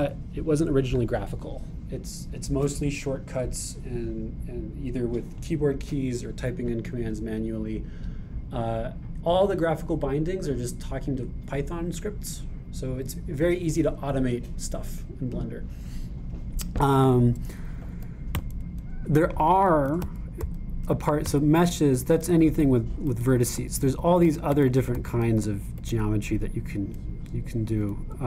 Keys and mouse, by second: 2.2-21.9 drag, 18.7 Up, 18.9 Up, 19.0 Up, 22.9 Down, 23.0 Down, 23.3 Down, 23.4 Down, 23.9 Up, 23.9-26.2 drag, 24.0 Up, 24.3 Up, 24.4 Up.